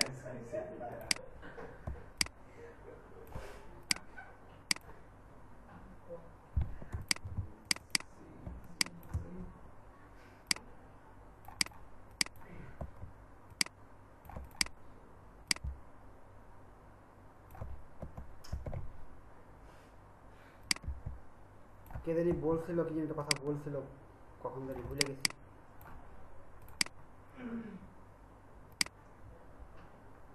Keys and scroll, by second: 7.0 ctrl+space, 18.6 ctrl+shift+z.